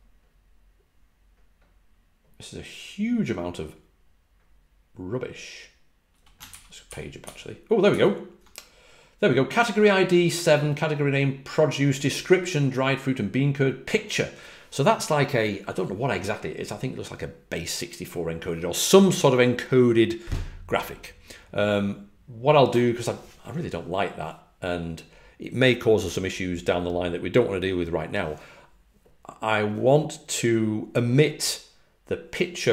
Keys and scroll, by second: 6.8 ctrl+b, 7.1 ctrl+b, 7.8 ctrl+f.